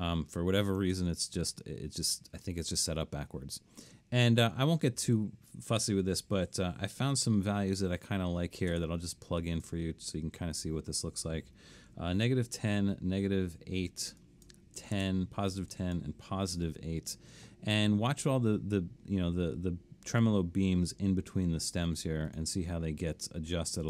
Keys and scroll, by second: 7.1-8.7 typing, 11.9-12.7 typing, 14.6-15.5 typing, 16.6 8.